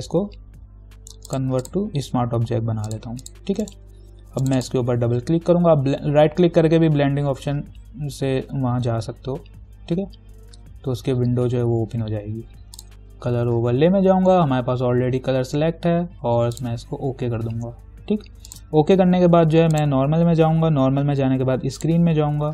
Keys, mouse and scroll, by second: 1.5 click, 3.8 right click, 4.6 click, 16.8 click.